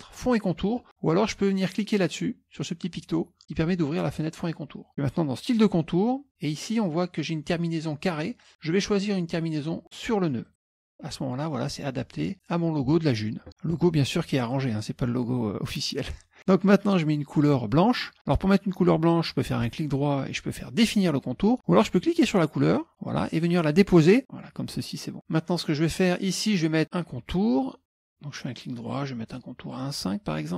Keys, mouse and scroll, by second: 3.4 click, 5.5 click, 10.5 click, 19.7 right click, 22.0 click, 22.8-25.1 drag, 25.4 click, 28.7 right click, 29.8 click.